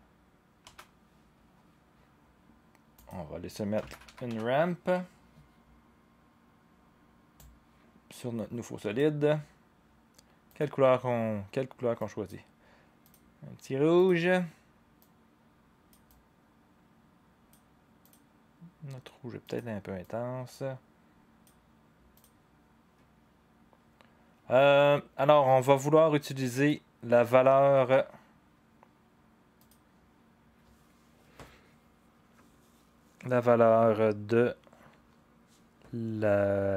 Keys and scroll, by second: 0.0-0.1 typing, 0.6 Return, 3.5-4.8 typing.